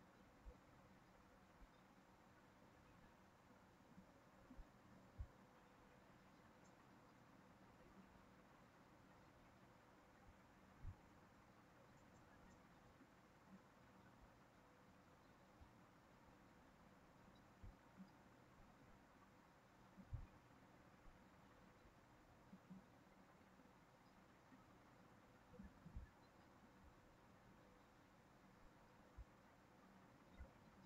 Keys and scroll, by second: 10.5 ctrl+c, 10.8 ctrl+v, 30.2 ctrl+z.